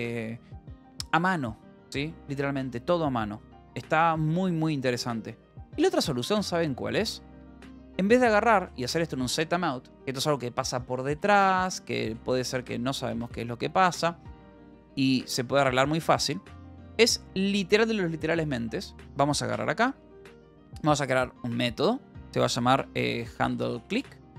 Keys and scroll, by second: 0.0-0.9 typing, 7.9 j, 8.8 j, 11.2-13.7 typing, 15.3 Return, 16.1 ctrl+s, 18.5 k, 19.4 o, 20.4 Return, 22.7-24.3 typing.